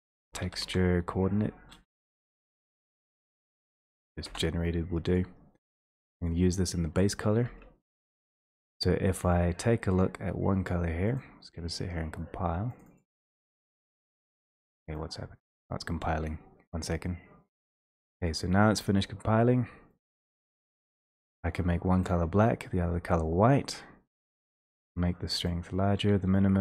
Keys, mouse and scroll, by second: 0.2-0.6 typing, 1.7-2.7 typing, 4.2 Return, 7.5 ctrl+space, 9.2 click, 10.0 click, 11.3 click, 13.0 click, 13.0-13.5 scroll, 14.1 click.